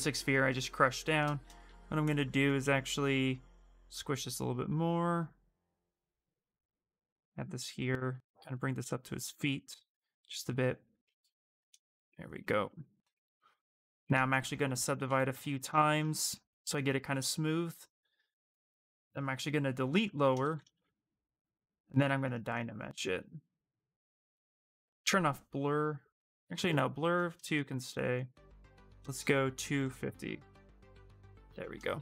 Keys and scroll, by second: 1.4 w, 10.6 q, 14.5 ctrl+d, 14.8 ctrl+d, 15.1 ctrl+d, 16.0 space, 20.6 shift+f.